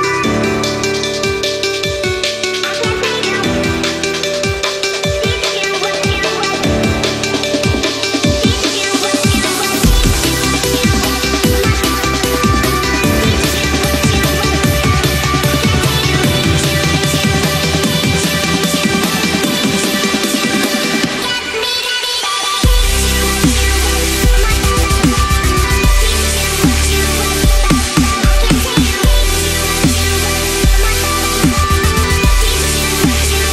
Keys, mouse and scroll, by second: 3.1 ctrl+a, 4.0 click, 7.6 right click, 8.6 click, 13.7 ctrl+a, 14.0 ctrl+v, 14.6 click, 15.7 space, 16.1-19.0 drag, 23.7 click, 26.6 ctrl+=, 26.9 space, 27.0-27.5 click, 27.3 space, 28.7 click, 30.8-32.2 drag.